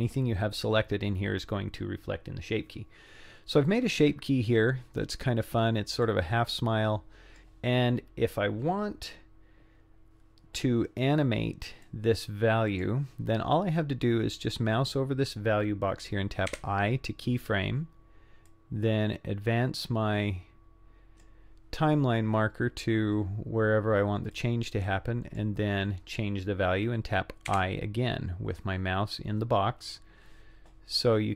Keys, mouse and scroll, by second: 6.0-7.4 drag, 11.8-12.9 drag, 16.6 i, 18.5-19.7 drag, 19.9-21.3 drag, 24.3-25.5 drag, 27.5 i.